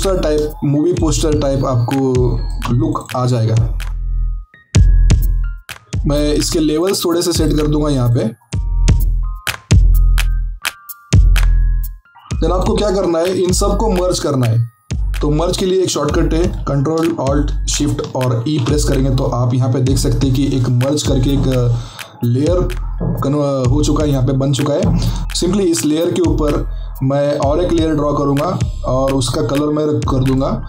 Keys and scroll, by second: 4.2 ctrl+z, 4.7 shift+Up, 5.0 shift+Down, 18.3 ctrl+alt+shift+e, 25.2 ctrl+z.